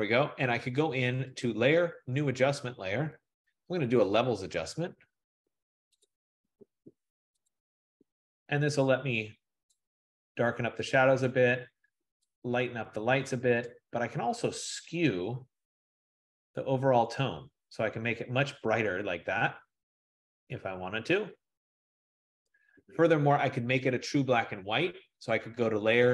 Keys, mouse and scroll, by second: 1.6-6.2 drag, 7.6 click, 12.2 click, 13.2 click, 16.7 F15, 22.5 click, 25.5 click.